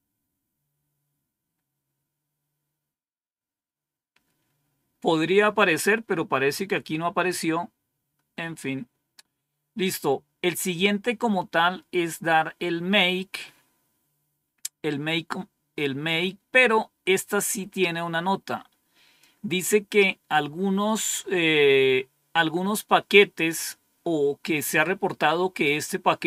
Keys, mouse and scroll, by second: 7.1-7.8 scroll up 2, 7.8-9.3 scroll down 3, 17.4-19.8 drag.